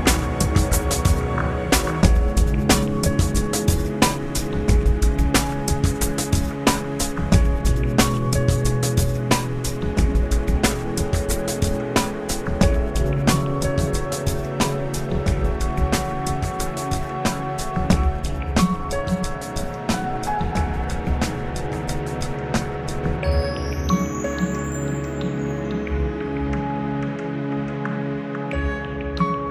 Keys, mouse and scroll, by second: 1.1 F9, 10.6 F9, 12.9-14.9 middle drag, 17.1 click, 18.2 scroll up 1, 18.8-19.2 scroll down 1, 19.2 shift+middle click, 24.3-25.4 middle drag, 26.2 Delete, 27.3 click, 28.5-29.5 shift+drag.